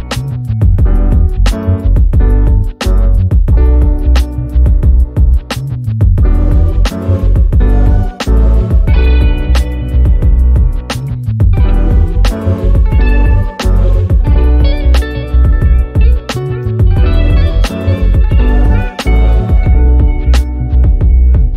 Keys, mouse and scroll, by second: 0.0-0.8 typing, 0.3-0.9 click, 1.1 F1, 1.6 Delete, 1.9-2.8 typing, 2.7-3.3 click, 3.3 F1, 3.9 shift+click, 5.6 click, 6.0 ctrl+z, 6.6 F7, 7.5 click, 8.1 F1, 8.8 shift+click, 10.3 ctrl+d, 10.6 h, 11.2-11.8 drag, 12.6 F7, 13.1 click, 13.5 F1, 14.2 End, 15.5-17.0 drag, 19.0 ctrl+scroll up 1, 19.9-20.8 drag.